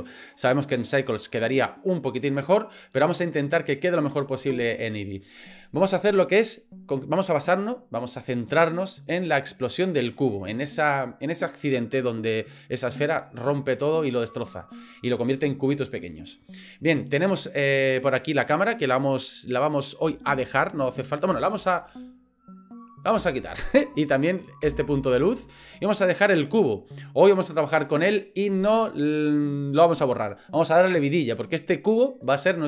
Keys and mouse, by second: 18.4 click, 23.1 Delete, 24.1 click, 24.6 Delete, 26.5-26.8 drag, 26.8-27.8 middle drag.